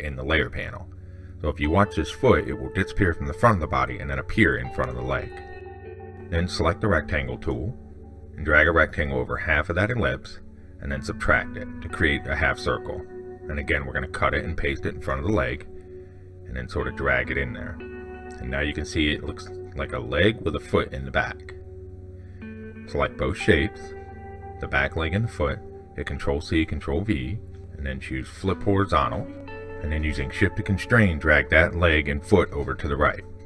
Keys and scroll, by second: 14.4 ctrl+x, 15.6 ctrl+v, 26.1 ctrl+c, 26.3 ctrl+v.